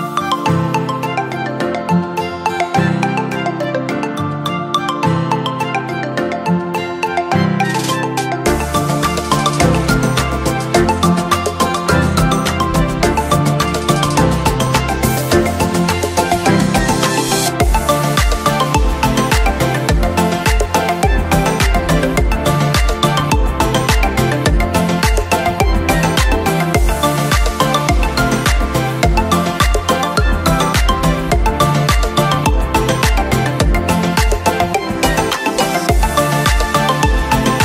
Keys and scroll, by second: 10.2 ctrl+?, 12.2 ctrl+j, 12.5 ctrl+?, 13.4 ctrl+', 13.9 ctrl+?, 14.5 ctrl+™, 15.2 ctrl+—, 18.3 ctrl+?, 19.3 ctrl+?, 20.0 ctrl+-, 20.2 ctrl+“, 21.0 ctrl+0, 21.4 ctrl+£.